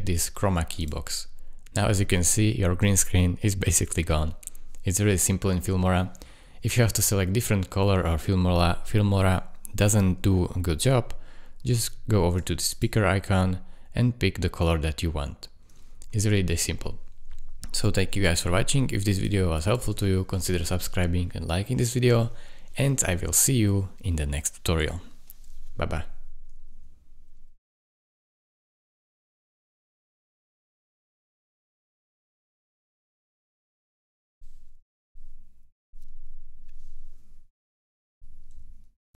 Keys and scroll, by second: 2.8 space, 6.8 space, 15.9 Escape, 19.9 space.